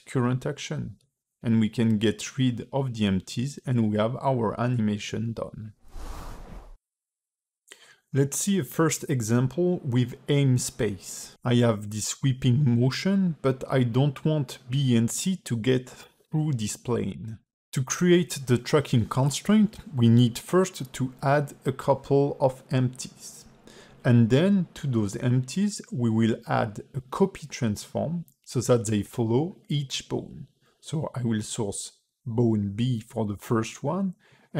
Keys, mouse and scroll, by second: 0.5 space, 0.9 click, 1.7 ctrl+Tab, 1.9 click, 2.7 shift+click, 3.0 x, 3.5 space, 7.7 click, 8.7 ctrl+Tab, 9.3 space, 12.6 space, 13.4 click, 14.3 d, 14.6 click, 15.0-15.4 d, 15.5 click, 15.7 d, 17.7 ctrl+Tab, 18.1 click, 18.6 shift+a, 22.0 g, 23.7 shift+d, 25.1 click, 27.0 click, 27.8 click, 30.4 click, 34.3 click.